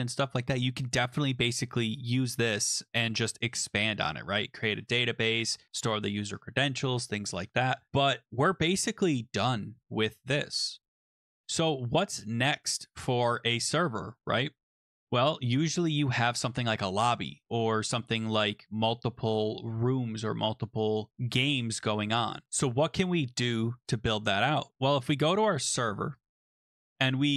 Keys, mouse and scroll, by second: 16.3 click, 22.4 Return, 22.4 click, 25.8 click, 26.2 click.